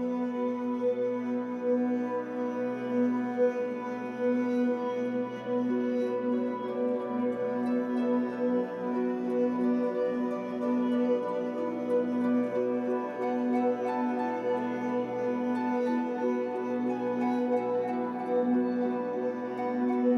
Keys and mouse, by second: 0.3 click, 1.1 ctrl+s, 1.4 alt+a, 2.3-10.3 drag, 7.6 space, 12.3 space, 13.2 ctrl+s, 15.6-18.0 drag, 18.1 click, 19.8-20.1 drag.